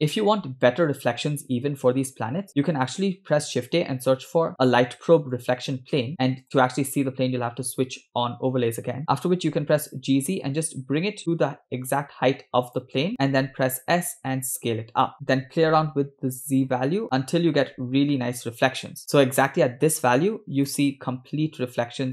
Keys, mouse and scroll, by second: 2.6 shift+a, 6.4 click, 9.1 g, 13.2 s, 15.3 g, 21.4 scroll up 1.